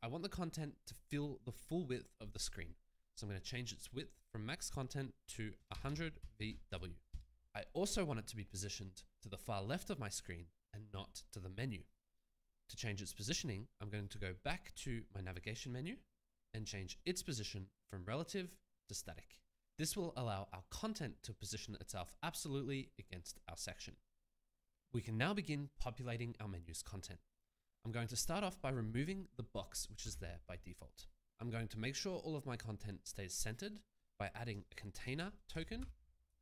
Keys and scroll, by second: 5.4-7.1 typing, 30.4 BackSpace, 35.2-36.4 typing.